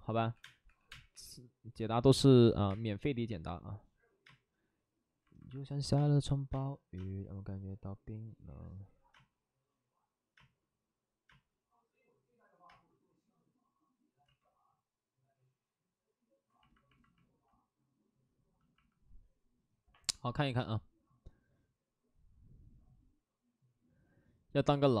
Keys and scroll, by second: 0.3-1.1 typing, 2.5 ctrl+z, 2.6 space, 8.4 space, 10.3 space, 14.2 ctrl+z.